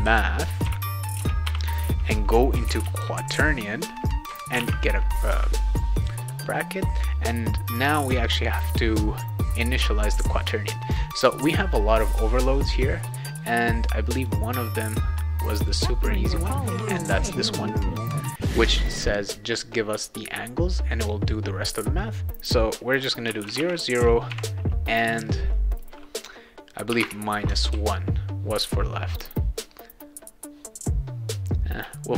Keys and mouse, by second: 0.0-5.1 typing, 11.2 click, 11.4 click, 11.6 click, 11.8 click, 11.9 click, 12.1 click, 13.4 click, 14.2 click, 14.6 click, 15.6 click, 23.0-24.3 typing, 26.6-27.5 typing, 27.7 ctrl+s, 29.1 click.